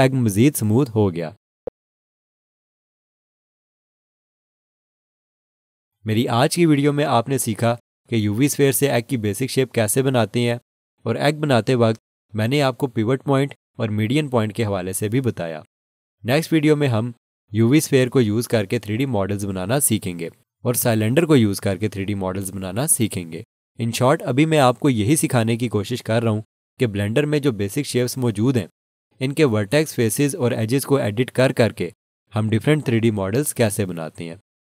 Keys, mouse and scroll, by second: 1.5 scroll down 1, 2.2 scroll, 2.4 alt+shift+click, 4.4 alt+click.